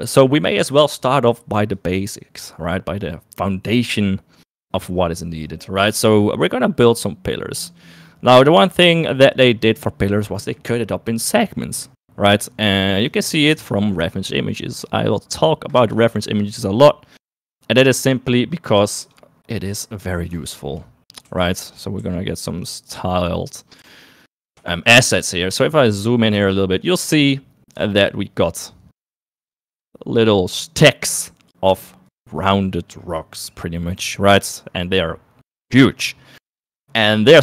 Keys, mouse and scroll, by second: 13.5 shift+a, 20.8 shift+middle click, 21.5 g, 22.1 s, 23.8 s, 24.7 shift+middle click, 25.7 s, 26.6 shift+middle click, 27.9 shift+middle click, 29.7 shift+middle click.